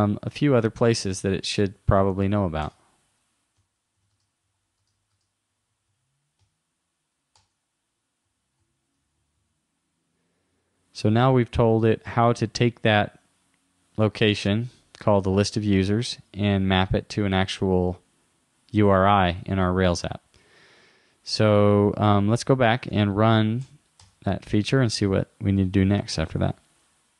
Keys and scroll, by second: 0.3 super+Right, 11.0 super+s, 22.4 super+w, 22.9 super+Tab.